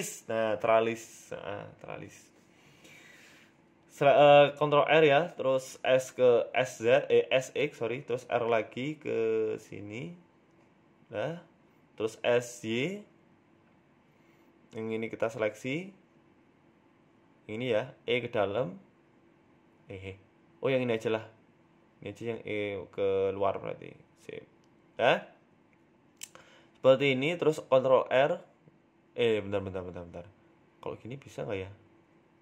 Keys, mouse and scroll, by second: 1.4 ctrl+r, 2.1 Tab, 2.7 ctrl+r, 4.5 s, 8.2 ctrl+r, 12.0 middle click, 12.6 scroll down 3, 12.8 middle click, 13.1 Tab, 13.5 s, 15.2 KP_1, 15.6 Tab, 15.7 scroll up 3, 16.7 click, 16.7-17.3 scroll up 1, 17.6 right click, 17.9 middle click, 18.9 right click, 19.5 r, 21.0 shift+middle click, 21.6 right click, 22.1 shift+right click, 22.8 middle click, 23.5 shift+right click, 24.3 middle click, 24.8 e, 27.3 middle click, 28.6 ctrl+r, 31.9 KP_1.